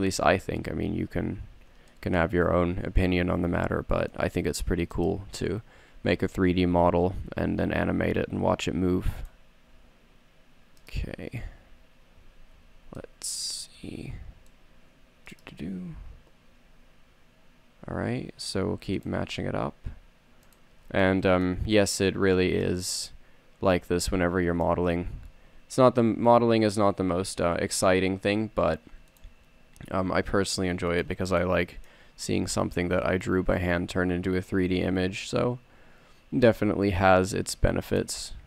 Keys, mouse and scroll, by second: 1.1 a, 3.4 z, 3.9 c, 6.8 g, 9.5 click, 10.0 s, 11.5 a, 13.2 middle click, 14.3 c, 16.7 e, 19.6 s, 25.8 e, 29.7 s, 31.6 click, 32.6 middle click, 34.6 s.